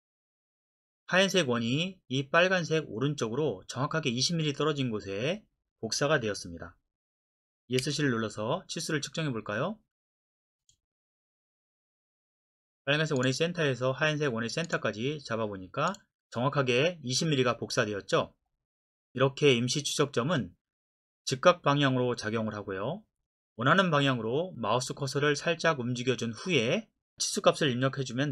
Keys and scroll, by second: 7.8 Escape.